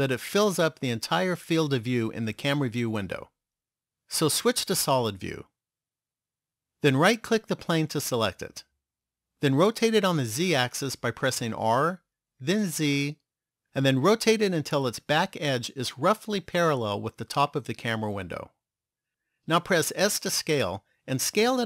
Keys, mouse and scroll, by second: 4.0 click, 7.9 right click, 11.8 r, 20.1 s.